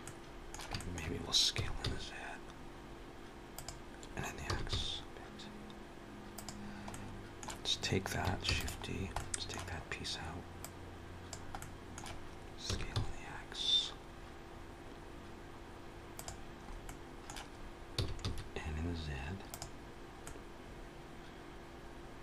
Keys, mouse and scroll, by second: 0.6 shift+middle click, 1.4 s, 4.6 s, 6.7 middle click, 8.3 shift+d, 8.7 scroll down 2, 9.0 middle click, 10.4 click, 11.4 middle click, 12.5 s, 16.4 scroll up 2, 16.7 middle click, 17.8 s, 20.1 middle click.